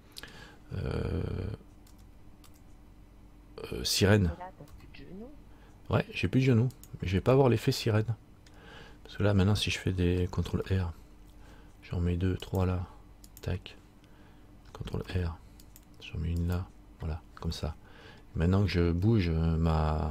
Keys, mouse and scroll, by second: 2.0 s, 7.6 middle click, 9.1-10.7 scroll up 2, 10.8 ctrl+r, 15.2 ctrl+r, 17.8 middle click.